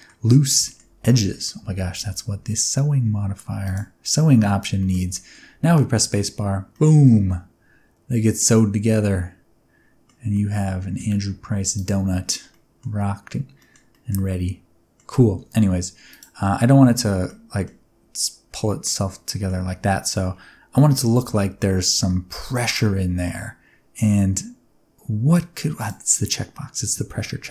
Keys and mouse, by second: 0.6 shift+middle click, 1.0 middle click, 1.6 Tab, 3.6 click, 4.7 shift+middle drag, 5.1 middle drag, 5.6 space, 6.7-10.2 middle drag, 10.4 middle click, 11.7 click, 12.5 middle click, 12.9 middle click, 13.5 middle click, 13.9 middle click, 14.3-14.9 middle drag, 15.2 space, 16.1 click, 16.8 space, 17.2 middle click, 18.6 middle click, 25.7 click.